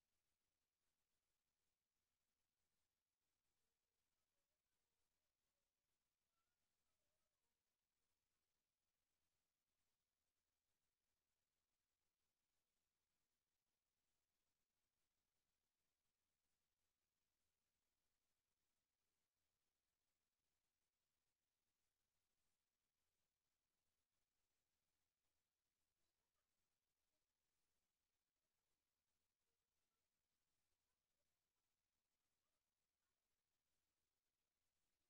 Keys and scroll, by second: 19.3 ctrl+c, 20.0 ctrl+v.